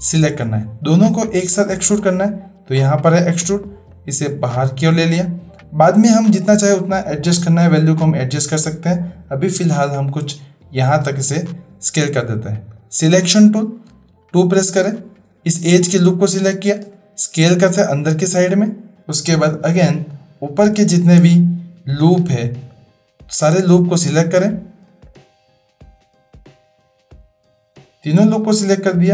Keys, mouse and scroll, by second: 2.7 click, 4.0-11.1 drag, 12.7 click, 14.3 2, 14.8 click, 16.8 s, 20.1-20.6 shift+drag, 22.3 3, 22.6 click, 25.1 shift+click.